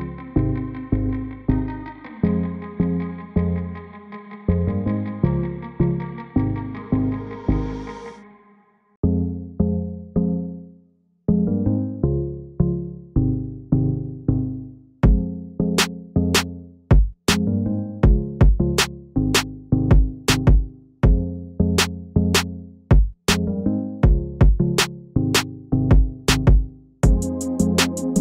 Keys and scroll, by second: 16.9 shift+space, 17.4-19.9 shift+space, 23.9-24.4 typing, 26.1 space, 26.2-28.2 space, 26.9-27.3 shift+space.